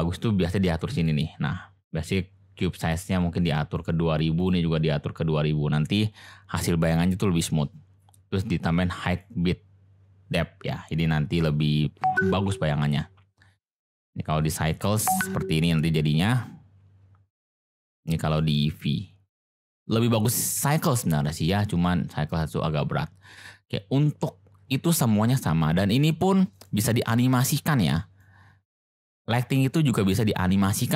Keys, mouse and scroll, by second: 0.9 click, 2.8-3.8 drag, 4.5-5.9 drag, 9.0 click, 13.7-14.9 drag, 18.4-19.8 drag, 23.3 click, 26.5 click, 28.2 click.